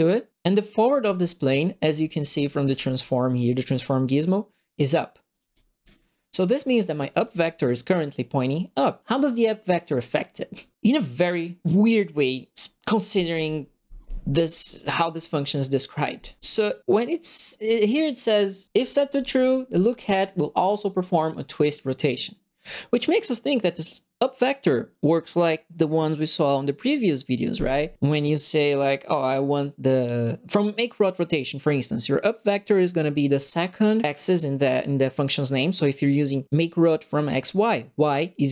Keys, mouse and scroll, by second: 1.6-4.0 typing, 1.7-3.8 right drag, 5.1-7.7 typing, 5.3-7.9 right drag, 9.0 right click.